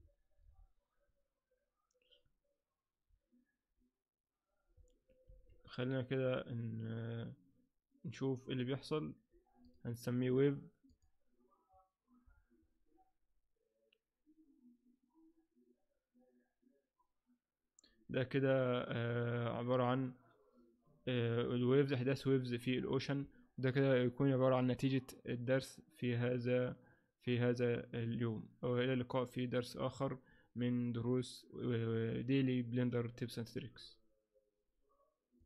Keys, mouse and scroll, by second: 1.5 scroll down 5, 3.0-3.6 scroll up 1, 3.7 scroll down 1, 3.8-4.1 scroll down 1, 5.2 alt+a, 9.8 click, 12.9-13.2 scroll up 2.